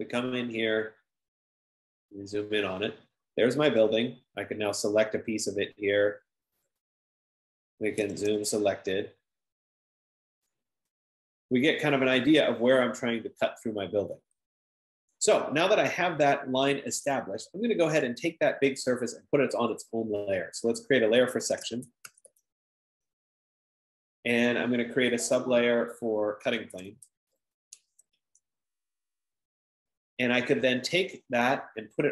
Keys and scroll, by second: 8.2-9.1 typing, 21.8-23.2 typing, 23.3 Return, 26.5 F15, 26.5-29.1 typing.